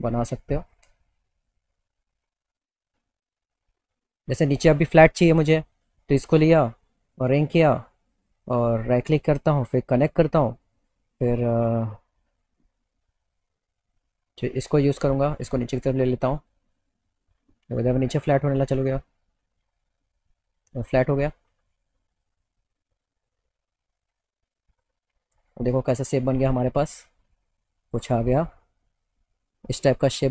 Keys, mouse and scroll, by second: 1.6 click, 5.5 click, 7.3 click, 10.1 click, 14.2-15.6 middle drag, 15.6-18.0 drag, 19.4-22.6 drag, 24.9 click, 26.0 click, 26.4 click, 27.6 alt+middle click.